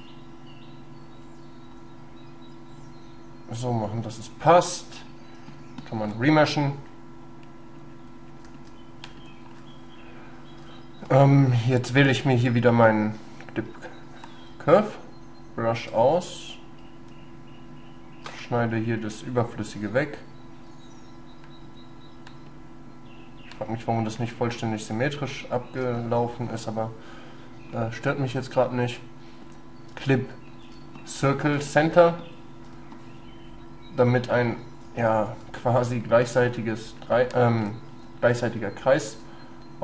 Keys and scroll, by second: 14.8 shift+space, 17.2 space, 30.0 space.